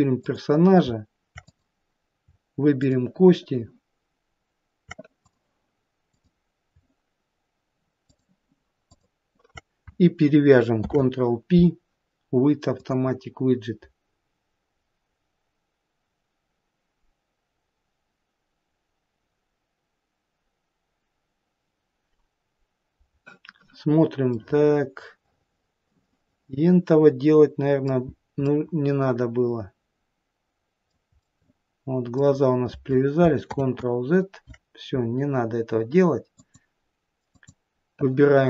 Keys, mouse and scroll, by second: 0.5 click, 1.7 click, 3.1 shift+click, 5.5 click, 6.4 click, 8.3 shift+click, 9.2 shift+click, 11.0 ctrl+p, 24.6 middle click, 25.7 middle click, 26.6 middle click, 27.5 middle click, 28.4-28.8 scroll down 1, 28.8 middle click, 31.4 middle click, 33.9 ctrl+z, 36.7 click, 37.6 click.